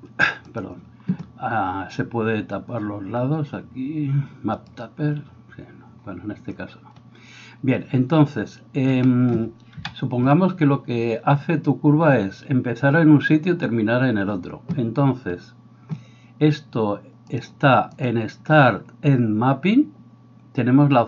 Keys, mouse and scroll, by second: 0.5 click, 0.6-4.6 middle drag, 4.6 click, 4.9-17.4 middle drag, 9.7 KP_7, 17.4-21.0 drag.